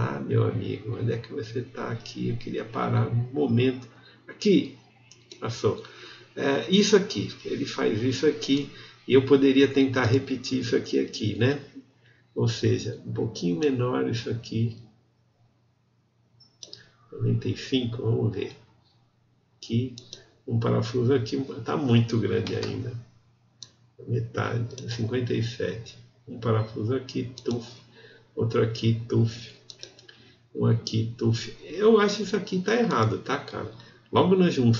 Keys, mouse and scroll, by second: 0.1 click, 0.3 alt+middle click, 1.1 alt+right click, 1.4 alt+middle click, 1.8 click, 2.0 alt+right click, 2.7 ctrl+z, 2.9 alt+middle click, 3.3 alt+click, 3.7 alt+middle click, 3.9 alt+click, 4.4 alt+middle click.